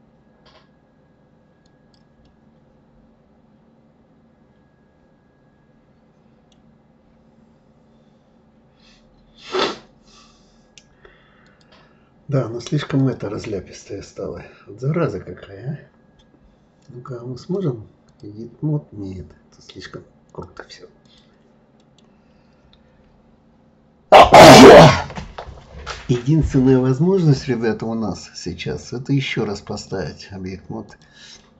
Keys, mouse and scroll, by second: 2.2-5.2 middle drag, 6.6 scroll down 3, 8.5-9.0 scroll up 2, 11.5 click, 13.0 click, 13.7-14.5 scroll down 3, 14.5 scroll down 1, 17.4-21.2 drag, 21.8-24.8 middle drag, 28.6-31.0 drag, 31.4-31.5 middle drag.